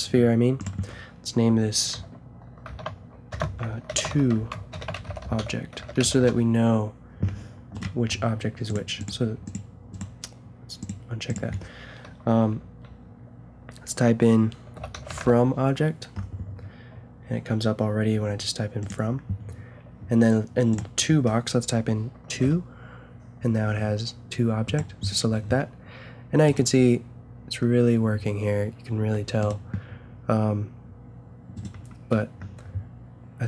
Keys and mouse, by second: 0.3 click, 0.4 middle click, 0.6-2.5 drag, 7.7 click, 8.7-10.7 middle drag, 10.7-13.2 drag, 20.7-22.6 drag, 26.5-27.3 drag, 26.7 g, 31.5-33.4 drag.